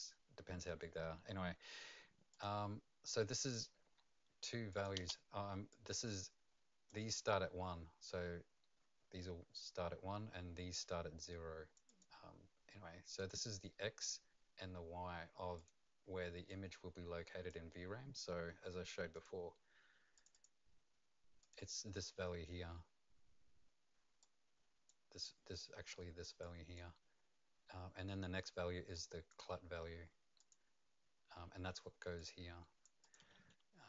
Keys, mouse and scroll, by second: 2.3 click, 4.7 click, 5.0 space, 5.7 click, 10.7 click, 11.2 click, 13.1 click, 13.2 click, 15.5 click, 16.5 click, 19.1 click, 20.3 click, 21.4 click, 24.2 click, 28.9 click, 30.4 click, 33.0 click.